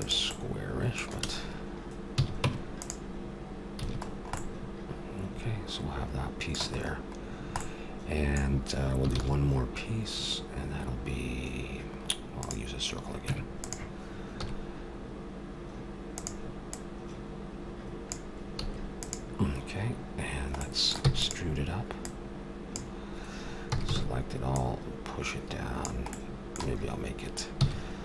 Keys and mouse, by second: 0.3 middle click, 2.1 a, 2.4 Tab, 3.8 a, 4.1 click, 4.3 middle click, 7.2-9.1 middle drag, 9.1 shift+a, 13.2 Tab, 14.3 s, 16.8-18.4 drag, 18.6 s, 21.0 e, 22.0-23.8 drag, 23.7 a, 23.9 a, 24.6-26.5 drag, 26.8 click, 27.5 s.